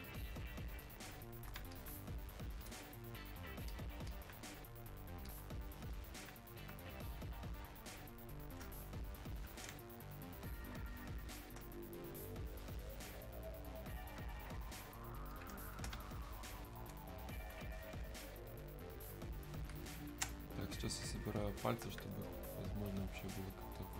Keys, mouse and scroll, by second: 6.8 space, 7.7 click, 7.8 space, 9.3 click, 9.7 space, 10.4 click, 10.4 space, 12.4-14.0 drag, 15.7 space, 16.0-19.8 alt+drag, 20.2 space, 20.8 click, 20.9 space, 22.1 space, 22.2-23.7 alt+drag, 23.7 space.